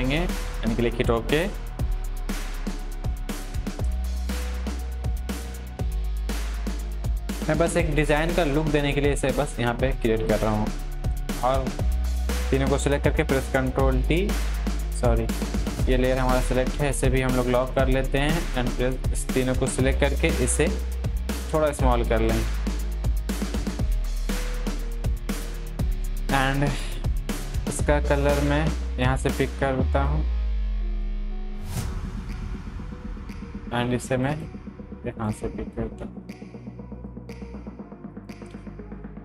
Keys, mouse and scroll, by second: 1.8 Up, 4.2 ctrl+t, 5.5-7.7 drag, 11.1 click, 11.5 ctrl+t, 12.1-13.2 shift+drag, 13.2 ctrl+t, 14.7 click, 19.8 ctrl+t, 20.6-22.1 drag, 23.7 Up, 24.0 Down, 24.2 click, 28.9 click, 28.9 click, 33.2 click.